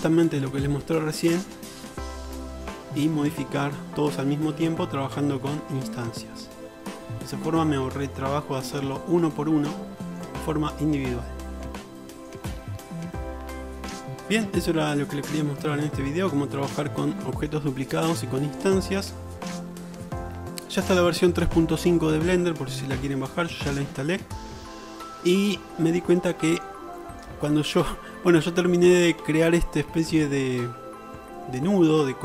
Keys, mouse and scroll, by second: 13.1 click, 13.2 middle click, 13.3 click, 13.5 middle click, 13.7 click, 13.9-17.8 middle drag, 17.8 click, 17.9 middle click, 18.0 click, 18.1-19.7 middle drag, 19.7-27.2 drag, 27.2 shift+middle drag, 27.4 click, 27.6-32.2 middle drag.